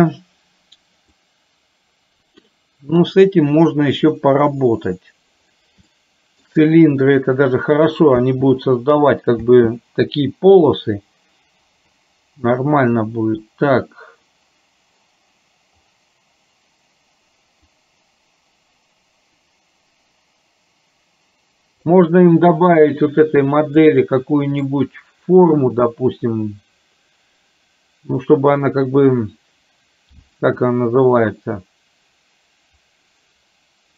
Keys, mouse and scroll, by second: 0.3 scroll down 1, 1.3-2.5 drag, 5.9 shift+middle click, 8.3 space, 9.5 space, 17.8-22.0 drag, 24.1 middle click.